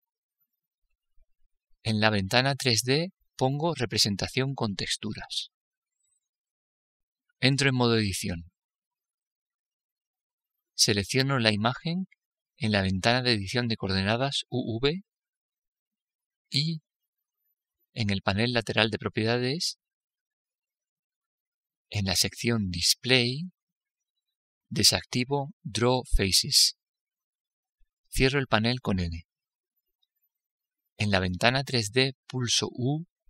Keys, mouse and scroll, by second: 4.1-6.0 drag, 6.2-8.4 middle drag, 9.1 middle click, 9.5 Tab, 32.0 n.